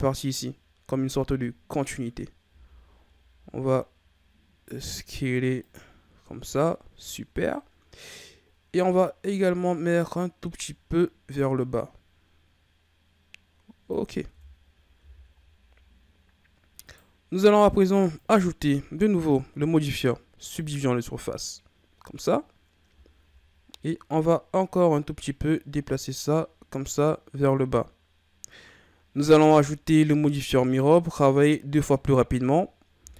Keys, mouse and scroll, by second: 2.4 s, 5.9-7.7 scroll down 4, 7.7-8.6 scroll up 3, 8.6-9.4 scroll up 1, 9.4-12.4 drag, 14.3 Tab, 14.6-15.0 scroll down 2, 15.0 a, 15.6-16.8 scroll up 6, 16.8 right click, 18.1-21.2 drag, 22.9-24.1 shift+scroll down 4, 24.1-27.2 drag, 29.4 Tab, 30.6 right click, 33.0 z.